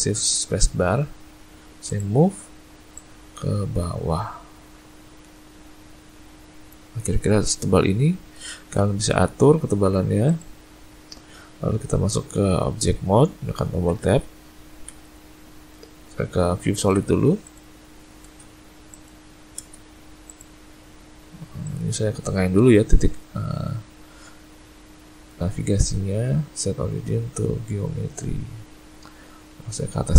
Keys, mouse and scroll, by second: 2.9 click, 7.0-7.8 scroll up 1, 7.8 middle click, 7.8-8.7 scroll up 1, 8.7 middle click, 9.4 Tab, 10.3 click, 13.9 Tab, 14.9 Tab, 15.3 z, 17.4 click, 18.3 shift+space, 19.6 shift+space, 25.4 right click, 28.4 click, 29.5 click.